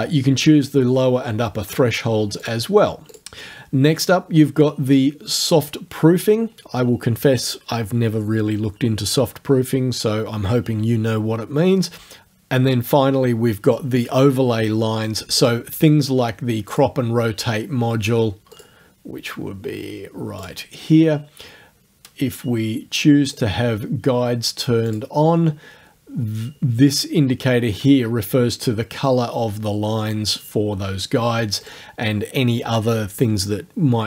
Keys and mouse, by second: 2.5 click, 3.1 click, 15.4 click, 16.7 click, 18.6 click, 20.5 click, 23.4 click, 24.9 click, 31.6 right click.